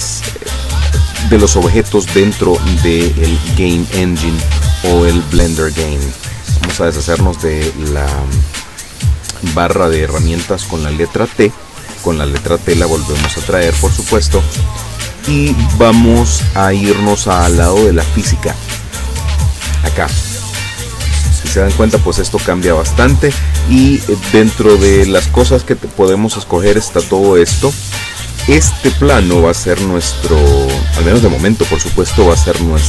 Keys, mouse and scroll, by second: 6.7 t, 12.4 t, 13.3 t, 20.4 click, 22.1 right click, 26.0 click.